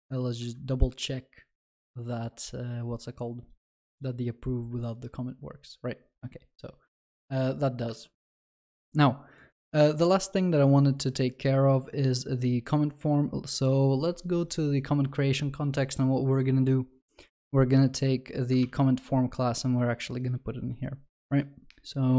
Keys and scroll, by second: 18.6 ctrl+x.